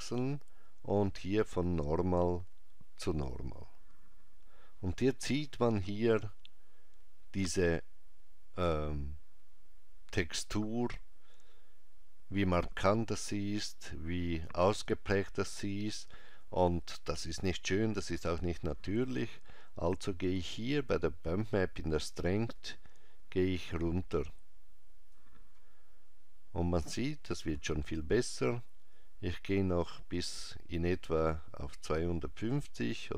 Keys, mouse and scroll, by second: 1.7 click, 22.4 click, 29.0 click.